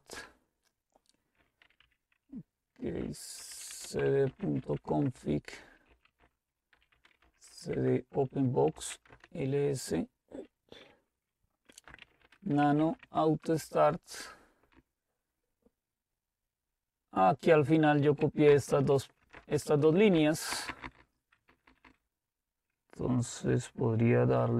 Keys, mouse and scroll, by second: 0.3 Return, 1.4-9.4 typing, 11.7-13.3 typing, 13.6 Return, 14.7 Down, 15.2-18.3 typing, 18.5 Up, 18.7 Up, 19.3 Return, 19.5 Return, 20.1 Up, 20.5 Down, 20.7 Down, 20.7-21.9 typing.